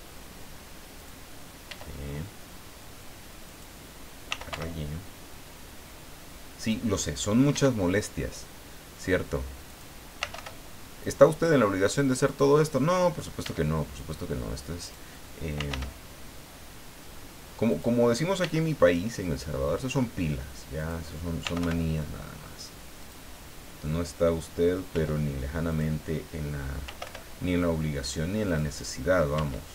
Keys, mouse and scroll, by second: 0.9 click, 1.6 e, 3.4 click, 4.0-5.0 typing, 6.6 click, 7.5 e, 9.7 click, 9.9-10.8 typing, 12.2 click, 13.4 e, 14.8 click, 15.3-16.2 typing, 17.7 click, 18.4 e, 20.7 click, 21.2-22.1 typing, 23.0 click, 24.9 e, 25.7 click, 26.6-27.5 typing, 28.4 click, 29.3 e.